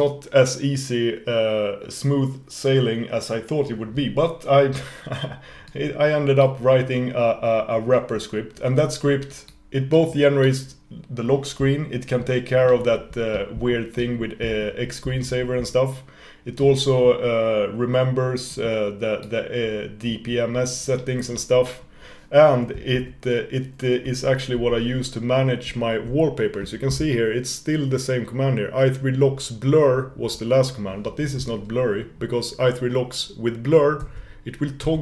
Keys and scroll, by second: 23.2 super+2, 24.7 ctrl+super+u.